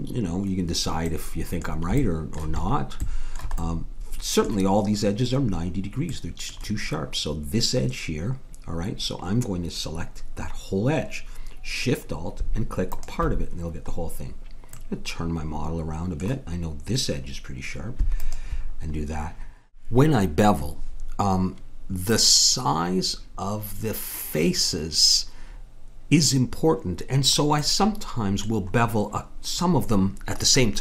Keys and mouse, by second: 6.1-11.9 middle drag, 12.9-14.7 drag, 14.7 middle click, 15.9-17.3 middle drag, 18.2-19.8 drag, 27.6-29.6 middle drag.